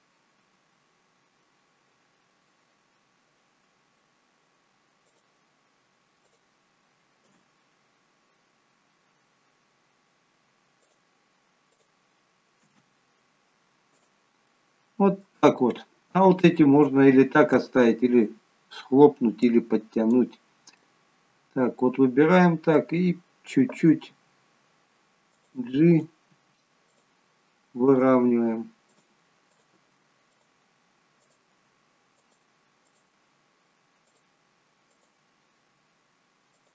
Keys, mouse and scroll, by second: 13.3-13.9 scroll down 2, 13.9 click, 13.9-14.2 scroll down 1, 14.6 middle click, 16.6 middle click, 17.9-19.6 scroll up 1, 19.6 click, 20.9 middle click, 26.0 click, 26.0 g, 26.4 g, 27.9 click, 28.3 g, 29.6 click, 29.8 g, 31.4 click, 31.6 g, 32.9 click, 33.3 g, 35.1 click, 35.6 g.